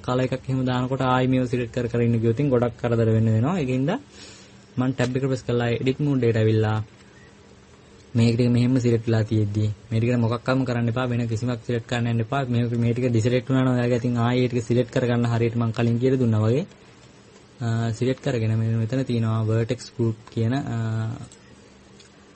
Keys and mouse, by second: 5.8 Tab, 12.1-17.5 middle drag, 17.7-22.3 middle drag.